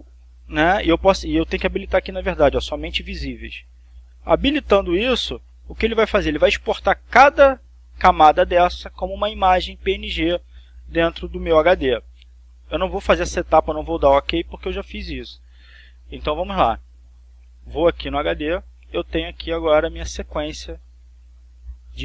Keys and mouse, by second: 4.1 click, 15.2 click, 18.6 click, 20.8 click, 21.5 click.